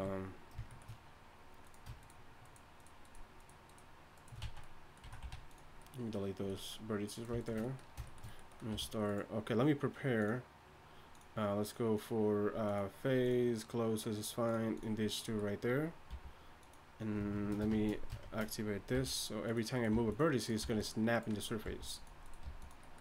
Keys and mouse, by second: 4.4 z, 5.0 z, 5.2 x, 8.7 r, 16.1 g, 17.3 shift+Tab, 17.7 shift+Tab, 18.2 shift+Tab, 19.0 g, 19.9 g, 20.6 g, 21.6-23.0 typing.